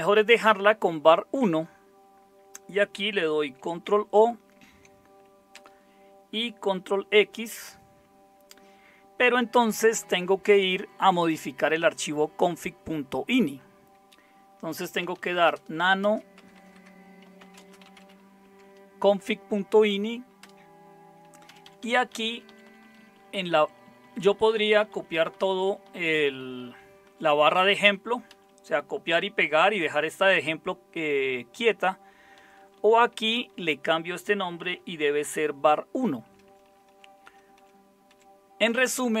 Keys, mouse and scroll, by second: 4.5 ctrl+o, 5.6 Return, 7.3 ctrl+x, 14.8-18.4 typing, 20.4 Return, 21.4 Down, 21.6 Down, 21.8 Down, 21.9 Down, 22.1 Down, 23.0-27.1 Down, 27.0-28.8 typing, 32.4 Right, 32.5 Right, 32.7 Right, 33.0 Right, 33.5-36.2 Right, 34.4-35.7 typing, 36.2 Delete, 36.5 Delete, 36.6 Delete, 36.9 Delete, 37.2-39.2 Delete.